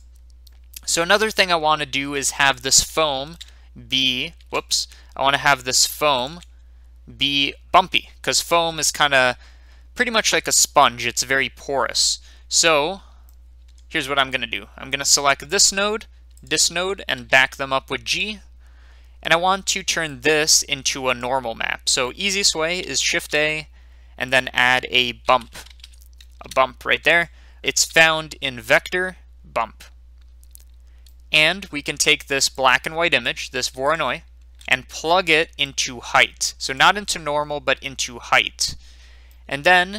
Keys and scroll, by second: 3.2 Tab, 4.4 Tab, 17.2 g, 23.1 a, 25.2-26.1 typing, 26.4 Return.